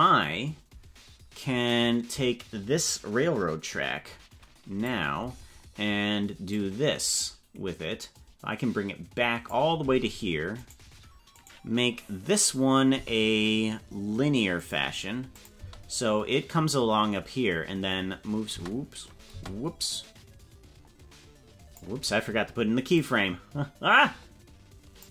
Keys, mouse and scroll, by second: 1.7-4.9 drag, 6.5-9.5 drag, 10.5 right click, 11.3 right click, 12.9 t, 15.3 click, 15.5 space, 18.5 space, 19.3 space, 19.9-21.9 drag, 22.9-25.1 drag.